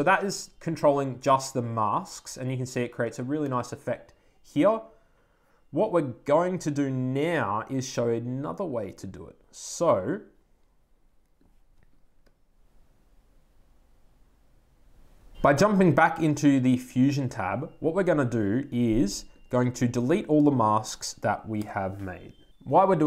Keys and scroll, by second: 21.4 BackSpace.